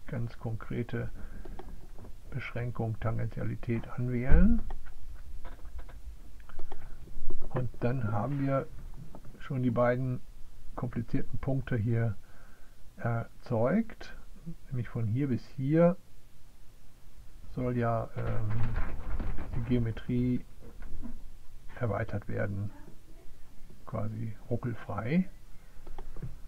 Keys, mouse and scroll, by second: 1.3 click, 6.0 click, 6.3 click.